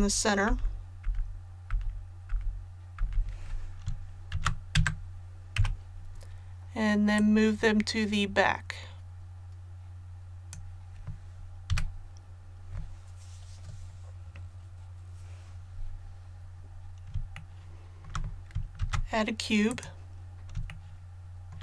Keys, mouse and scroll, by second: 0.0-0.5 typing, 1.7 typing, 3.0 typing, 4.3 shift+d, 5.6 KP_7, 7.2-11.4 drag, 11.7 a, 16.2 scroll down 1, 17.3 shift+middle click, 18.8 shift+a, 19.7 click.